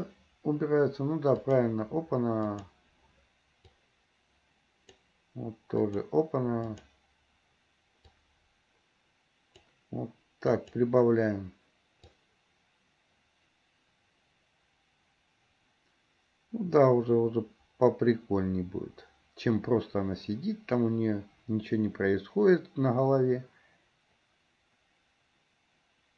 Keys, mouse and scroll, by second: 1.6 click, 2.7 click, 3.9-5.3 drag, 6.1 drag, 6.9 click, 8.1-9.8 drag, 10.7 click, 12.3-26.1 drag.